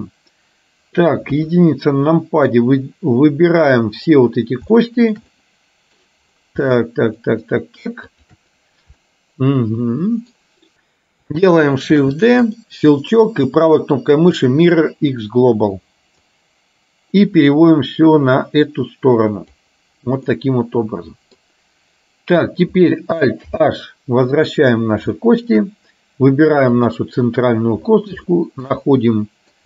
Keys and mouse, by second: 1.4 KP_1, 2.4-4.2 drag, 4.9 shift+middle click, 5.4 middle click, 7.4 middle click, 8.3 shift+click, 9.0-10.4 middle drag, 10.7 KP_1, 12.0 shift+d, 13.2-15.4 right drag, 16.3-19.7 drag, 20.4-21.5 middle drag, 23.7 alt+h, 25.3 shift+middle click, 28.3 shift+middle click, 28.9 middle click.